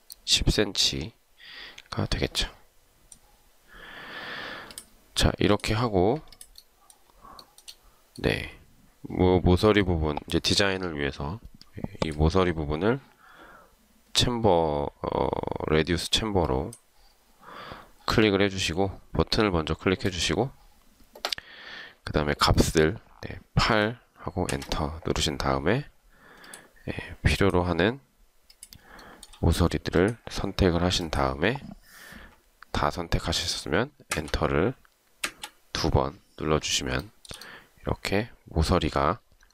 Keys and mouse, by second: 7.5 shift+right click, 23.9 8, 24.5 Return, 29.2 shift+right click, 34.2 Return, 35.3 Return, 37.2 shift+right click.